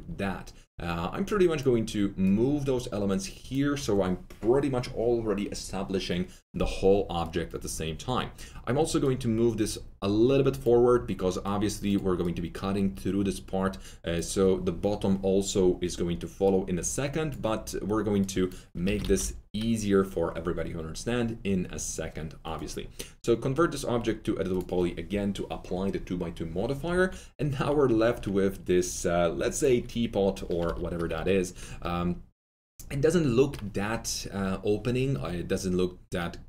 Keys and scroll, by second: 18.8 F3, 18.9-19.6 typing, 30.6 F3.